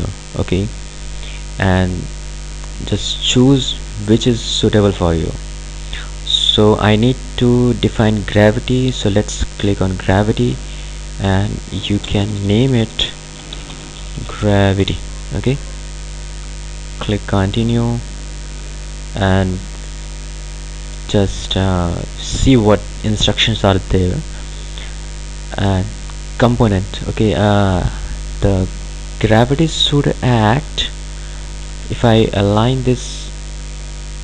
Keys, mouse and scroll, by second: 3.7-7.5 drag, 8.6 click, 12.0 BackSpace, 13.3-15.4 typing, 17.6-21.9 drag, 29.5 ctrl+alt+Num_Lock, 29.7-32.5 ctrl+alt+drag, 32.5-34.2 ctrl+alt+drag.